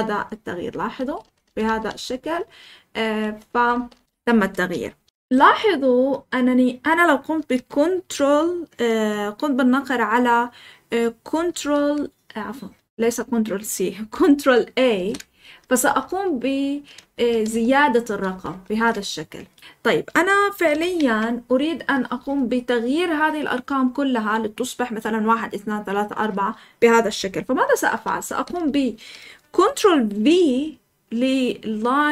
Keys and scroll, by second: 0.0-4.0 typing, 5.1 Escape, 5.1 k, 11.5 ctrl+c, 14.9 ctrl+a, 15.8 typing, 16.9 typing, 17.5 ctrl+a, 18.0 ctrl+a, 18.2 ctrl+a, 18.4 ctrl+a, 18.6 ctrl+a, 20.7-21.5 typing, 27.9-28.5 typing.